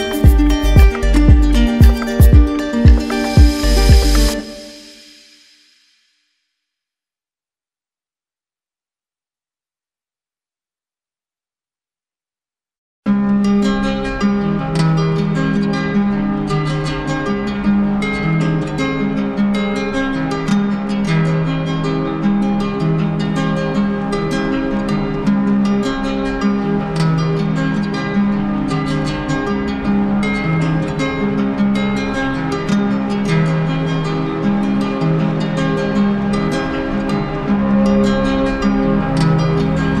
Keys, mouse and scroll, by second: 3.3 click, 4.1 click, 6.3 click, 6.8 ctrl+d, 8.0 click, 8.6 alt+click, 9.6 click, 14.0 click, 14.5 alt+click, 20.1 click, 23.2 click, 27.1 click, 36.0-37.4 drag.